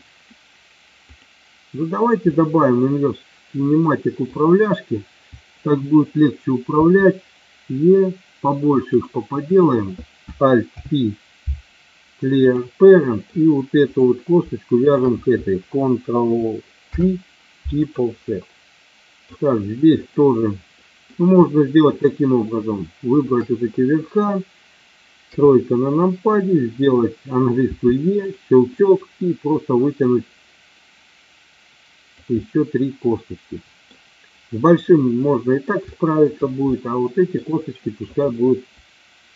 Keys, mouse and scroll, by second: 2.3-4.3 middle drag, 6.8 e, 8.9 click, 10.7 alt+p, 12.9 middle click, 13.8 click, 16.8 ctrl+p, 18.4 middle click, 19.9 click, 20.7 middle click, 23.1 shift+click, 25.3 KP_3, 27.6 e, 28.3 click, 28.9-32.0 drag, 32.4-33.9 middle drag, 34.9 middle click, 35.9 shift+middle click, 36.6 middle click, 38.0 click.